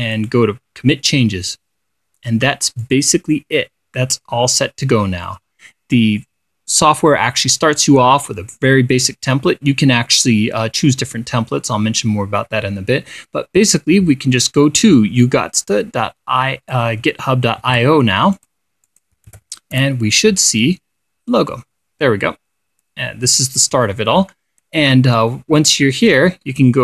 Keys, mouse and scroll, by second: 0.6 click, 3.3 click, 15.8-17.4 drag, 18.1 ctrl+c, 18.8 click, 19.3 click, 19.8 ctrl+v, 20.4 ctrl+Return, 26.1 click.